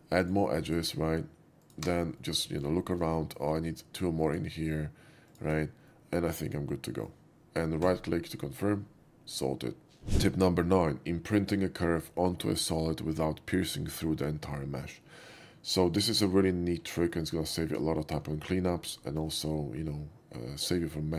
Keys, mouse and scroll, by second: 0.3 ctrl+click, 0.8 ctrl+click, 1.7 ctrl+click, 2.2 ctrl+middle click, 2.8 shift+middle click, 3.2 shift+middle click, 4.4 ctrl+drag, 5.4 ctrl+click, 5.9-7.1 ctrl+middle drag, 7.8 ctrl+right click, 17.2 shift+middle click, 17.6 shift+middle click, 18.0 shift+middle drag, 18.7 shift+scroll up 1, 19.1 shift+middle click, 20.8-21.1 shift+scroll down 1.